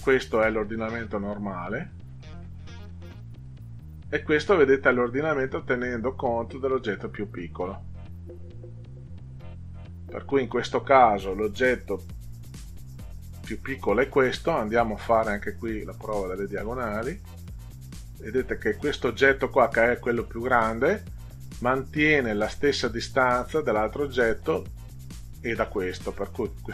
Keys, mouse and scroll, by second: 1.9 click, 3.5 click, 15.2-18.5 drag.